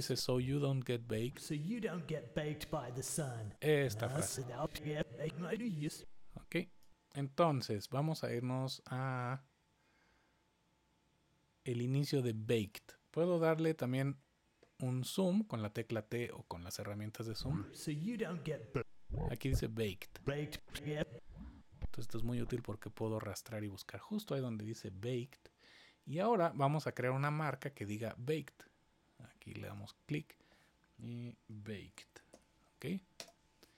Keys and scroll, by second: 13.4 t, 14.1 t, 31.2-32.8 typing, 33.1 Return.